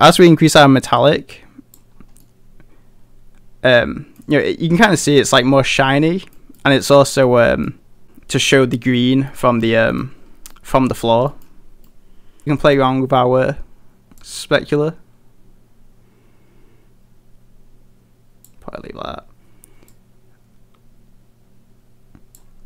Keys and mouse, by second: 0.6-1.9 drag, 2.2-4.2 middle drag, 4.9 middle click, 5.8-6.4 middle drag, 6.6 middle drag, 7.2-7.7 middle drag, 9.3 middle drag, 9.9 middle drag, 10.6 middle click, 11.3 middle click, 11.9-12.4 middle drag, 12.6 middle click, 14.4-18.6 drag, 19.9-22.4 drag.